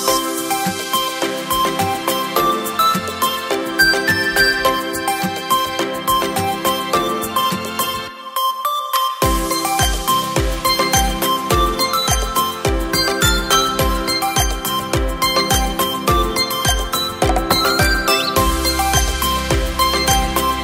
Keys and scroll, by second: 1.3 Down, 1.8 Down, 1.9 Down.